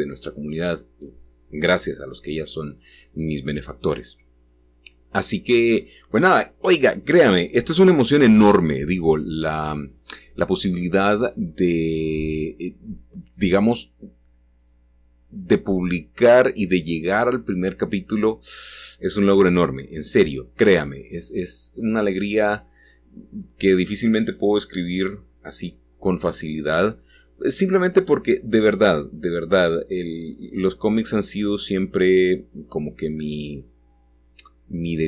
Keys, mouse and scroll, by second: 0.4 click, 6.7 g, 9.5-11.5 drag, 15.0-15.9 scroll up 1, 15.8 click, 20.1 click, 22.7 click, 25.7-26.8 middle drag, 25.7-26.8 scroll up 2, 27.7 g, 31.7 shift+click, 33.9 click.